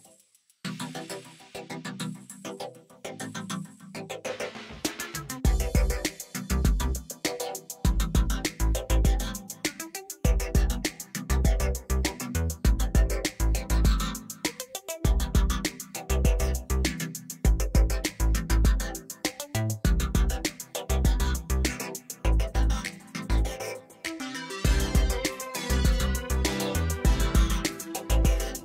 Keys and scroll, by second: 0.4 2, 1.9 ctrl+b, 3.6 ctrl+-, 4.1 s, 9.9 Tab, 12.6 Tab, 13.0 a, 13.2 s, 15.0 Tab, 16.2 Tab, 22.2 ctrl+r, 22.8 Return, 23.0 s.